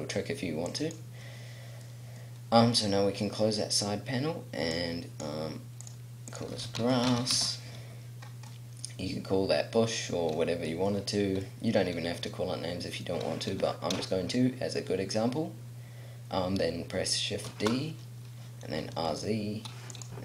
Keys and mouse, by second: 0.6 middle click, 1.6 click, 5.1-6.9 middle drag, 6.9-8.5 drag, 7.2 s, 11.0 click, 17.5 shift+d, 20.0 click.